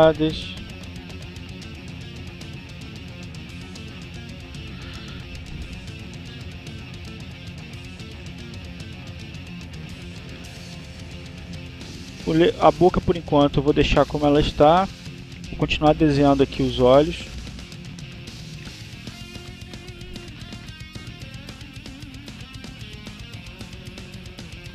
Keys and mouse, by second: 1.4-2.8 drag, 3.3-4.7 drag, 7.2-8.9 drag, 10.1 click, 20.4 click.